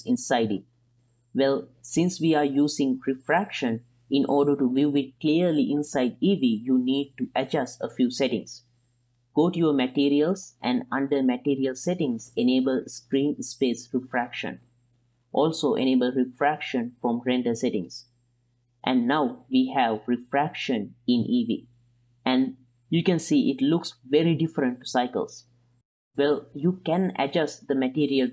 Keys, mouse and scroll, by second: 2.8-4.2 middle drag, 5.5 right click, 8.0 click, 10.6 click, 14.0 click, 15.8 click, 17.4 click, 18.6-22.4 middle drag, 22.4-28.3 drag.